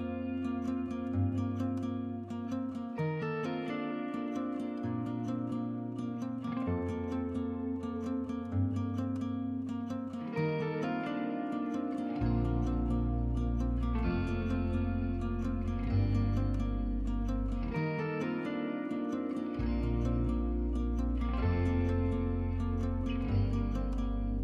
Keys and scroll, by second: 1.9 1, 16.2 2.